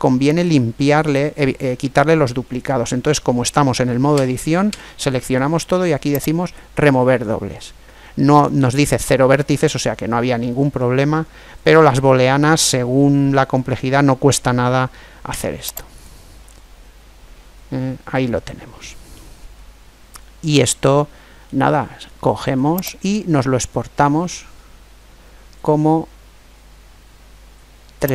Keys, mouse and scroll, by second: 3.9 a, 4.4 a, 6.2 click, 9.5 click, 15.1 Tab, 16.2-18.2 middle drag, 20.4-22.4 middle drag, 22.8-24.6 drag.